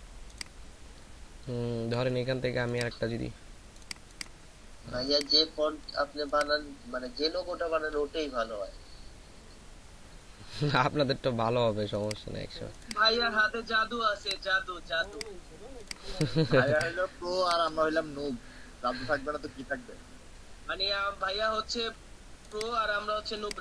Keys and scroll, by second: 18.2 shift+Left, 18.4 shift+Left, 18.6 shift+Left, 18.8 shift+Left, 19.4 shift+Left, 23.3 ctrl+alt+space.